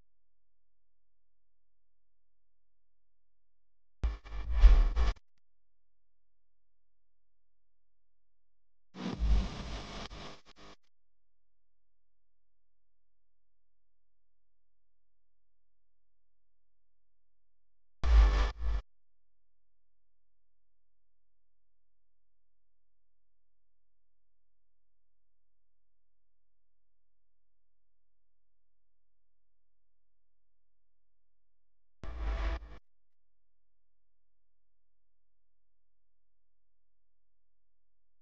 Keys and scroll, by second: 19.6 space, 20.1 super+space, 20.2 super+space, 20.3 super+space, 20.4 super+space, 20.6 super+space.